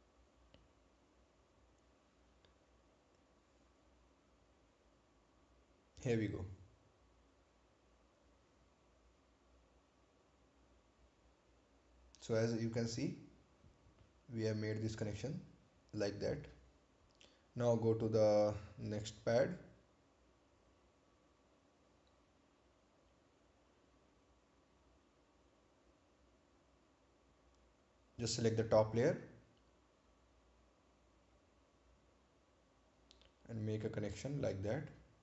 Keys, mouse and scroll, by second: 0.7 right click, 3.5 click, 7.7 click, 13.7 scroll down 1, 16.4 right click, 17.7 ctrl+click, 19.7 scroll down 1, 20.8 scroll up 1, 23.4-23.7 scroll down 1, 24.8-25.3 scroll up 1, 29.6 click, 32.3 click.